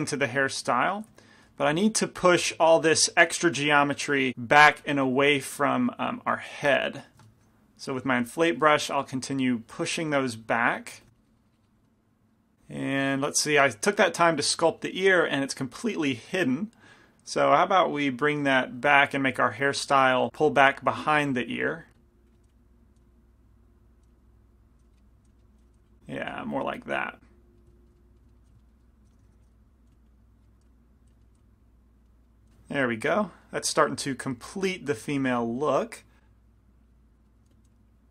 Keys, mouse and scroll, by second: 1.2 i, 1.7 f, 2.5 f, 4.9 f, 5.6-7.4 middle drag, 6.5-10.4 drag, 7.4 shift+f, 11.1 f, 11.2 click, 11.9-14.4 middle drag, 17.0-19.6 drag, 19.2 f, 19.7 f, 20.3 ctrl+z, 20.9-24.1 drag, 22.5 f, 23.0 f, 24.1-26.5 typing, 24.4 click, 25.3-26.5 middle drag, 27.2 click, 27.6 right click, 28.5 f, 29.7-30.8 drag, 29.7-31.4 typing, 30.5 right click, 30.9-32.5 drag, 32.5 f, 35.4 f, 36.3-37.7 drag, 37.3 right click, 37.5 f, 37.7 f, 37.9-38.1 drag.